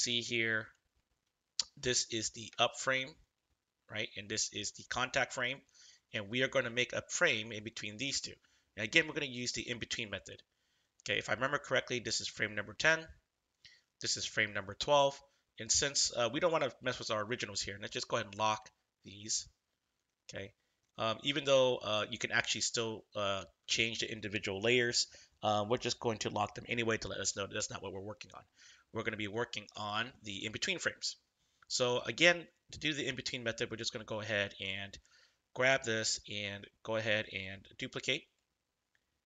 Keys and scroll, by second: 1.2 ctrl+=, 1.6 ctrl+=, 2.4 space, 5.4 ctrl+=, 5.7 ctrl+=.